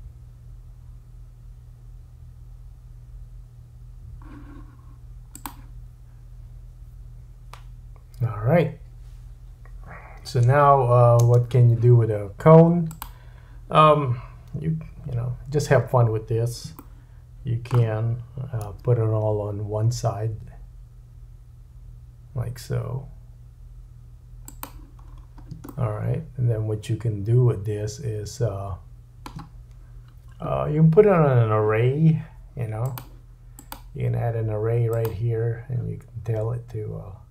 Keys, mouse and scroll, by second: 5.4 click, 11.3 space, 12.9 click, 14.3-25.2 drag, 14.9 KP_7, 16.8 shift+middle click, 18.6 g, 25.1-25.6 scroll up 4, 25.8 shift+middle click, 28.7-32.8 shift+drag, 32.9 click.